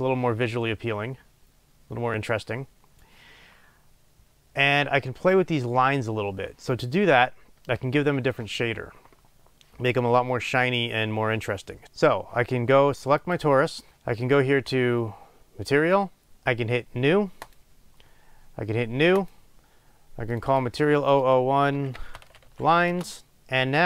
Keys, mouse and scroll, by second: 13.3 click, 17.7-19.9 drag, 20.4-23.8 drag, 23.0 Return.